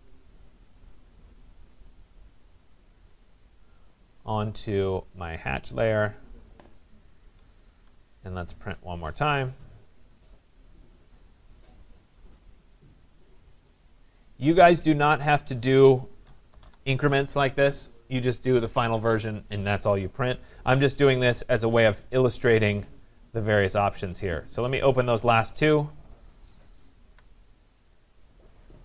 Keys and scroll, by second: 7.2 Escape, 16.5 BackSpace.